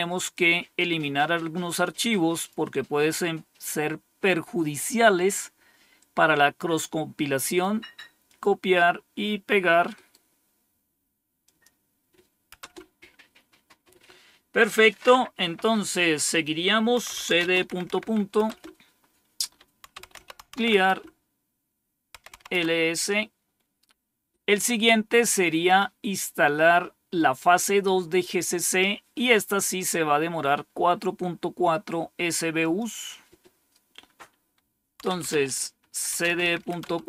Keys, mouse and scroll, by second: 0.2-2.4 drag, 7.2 right click, 8.1 click, 9.8 right click, 11.3 click, 12.5 Return, 16.7-18.3 typing, 19.5-22.8 typing, 25.5 click, 32.4 click, 34.7-37.0 typing.